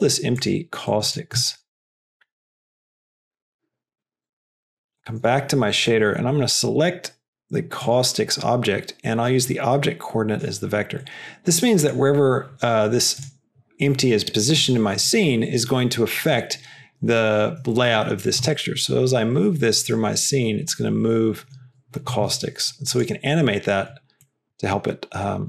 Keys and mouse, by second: 0.8 click, 5.8-8.1 drag, 9.4-10.6 drag, 11.1 click, 18.3 g, 23.0 click, 24.1 middle click, 25.3-25.4 drag.